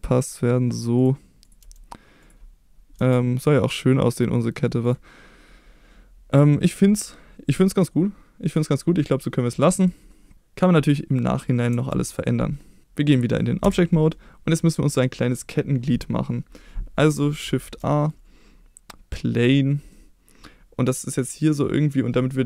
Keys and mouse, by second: 0.9 click, 1.6 g, 2.2 click, 2.9 r, 4.8 click, 7.5-9.0 middle drag, 9.9 middle click, 11.9 ctrl+s, 13.6 Tab, 14.1 middle click, 14.8 middle click, 17.6 shift+a, 19.9-21.9 middle drag.